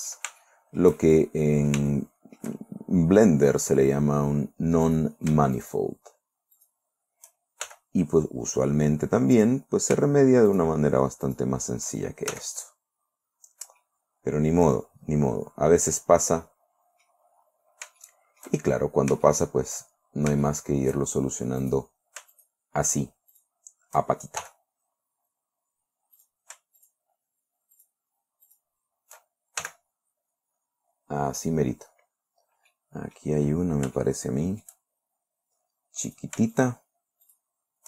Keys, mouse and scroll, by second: 0.9-3.0 shift+middle drag, 3.2-3.5 shift+scroll up 3, 3.7 scroll down 2, 5.4 right click, 6.0 shift+right click, 7.0 shift+right click, 8.1 shift+f, 9.8 right click, 11.0 shift+right click, 11.7 shift+right click, 12.8 shift+f, 13.4-13.8 scroll down 2, 14.3-17.7 drag, 17.9-18.2 scroll up 2, 18.5 shift+right click, 18.7 shift+middle click, 19.2 shift+scroll up 3, 19.7 shift+middle click, 20.5 shift+scroll up 2, 20.9 shift+middle click, 21.4 shift+click, 22.1 right click, 22.8 shift+right click, 23.8 shift+right click, 24.9 shift+f, 26.6 right click, 27.2 shift+right click, 28.2 shift+right click, 29.0 shift+right click, 30.1 shift+f, 31.2 scroll down 1, 33.2 click, 34.1 scroll up 1, 34.4 shift+click, 35.4 shift+scroll up 2, 36.6 right click, 37.0 shift+right click, 37.7 shift+right click.